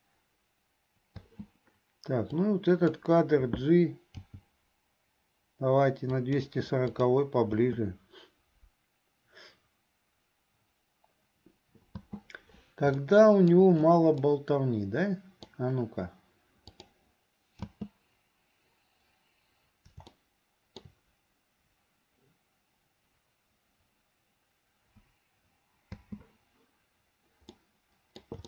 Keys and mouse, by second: 1.4 space, 2.4 click, 4.3 g, 7.2 click, 7.8 space, 12.2 space, 13.3 shift+middle click, 14.4-15.6 middle drag, 16.8 click, 17.8 space, 20.3 shift+middle click, 26.0 space, 27.6 middle click.